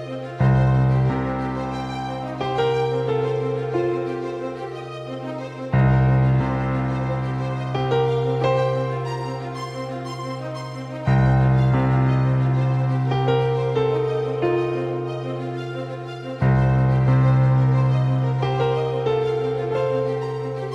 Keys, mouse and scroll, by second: 1.1-5.3 drag, 5.7 middle click, 9.3-14.6 drag.